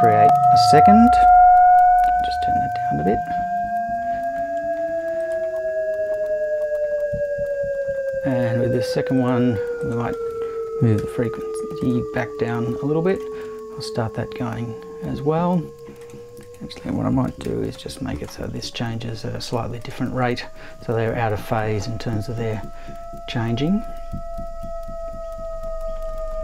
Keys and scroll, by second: 10.7 BackSpace, 11.0 5, 17.3 BackSpace, 17.4 1.